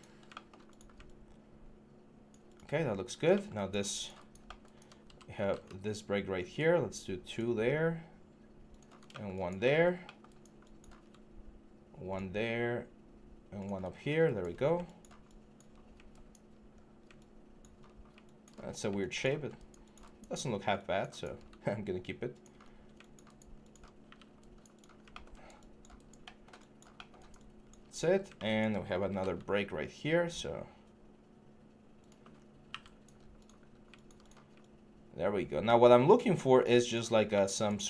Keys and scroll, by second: 15.5 1, 16.5 3, 18.3 3, 20.3 1, 27.9 1, 28.8 g, 32.1 3, 32.5 q, 36.8 1.